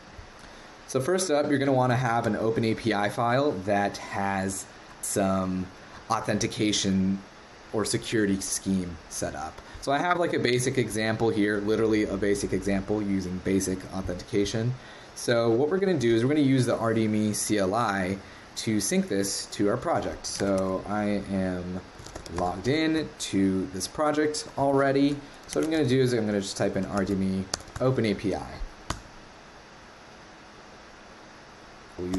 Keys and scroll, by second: 2.2 super+Tab.